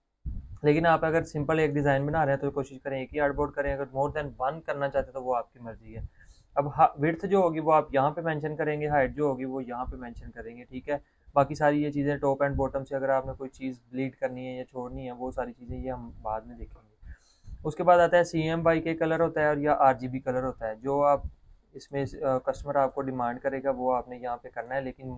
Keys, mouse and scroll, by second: 1.1 click, 15.4-18.9 scroll down 1, 19.2 click, 21.8 click.